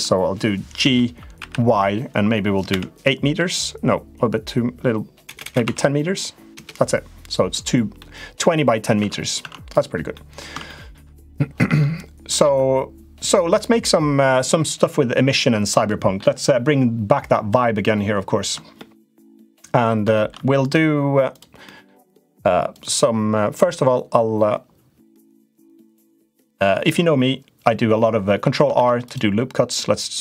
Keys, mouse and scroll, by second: 0.5 g, 7.7 middle click, 8.7 Tab, 9.1 Tab, 9.4 click, 9.9 middle click, 10.4 middle click, 11.7 middle click, 12.2 Tab, 15.6 middle click, 18.5 shift+middle click, 19.3 middle click, 19.9 shift+middle click, 20.4 click, 21.4 middle click, 21.8 click, 22.4 click, 25.0 click, 25.4 click, 26.2 Tab, 28.5 ctrl+r.